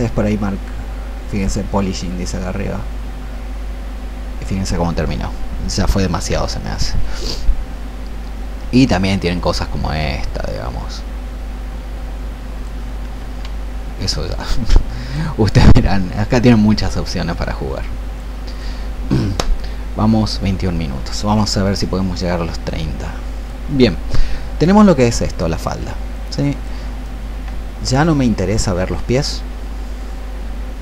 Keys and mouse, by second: 6.1 ctrl+z, 9.3-13.1 drag, 14.4-30.8 drag.